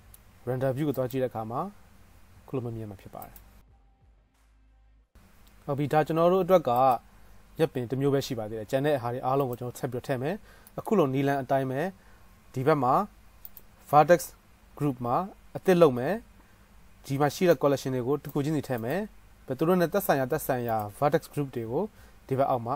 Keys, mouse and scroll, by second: 1.6-3.4 right drag, 3.4 middle click, 3.5-7.9 right drag, 7.9 middle click, 8.0-17.8 right drag, 9.6 click, 9.6 middle click, 17.8-19.1 middle drag, 19.1-22.7 right drag, 20.9 drag, 20.9 middle drag.